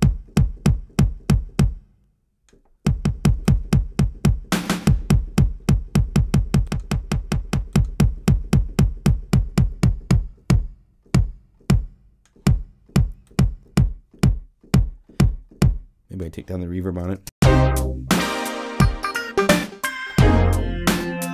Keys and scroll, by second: 17.0 0, 17.2 Home.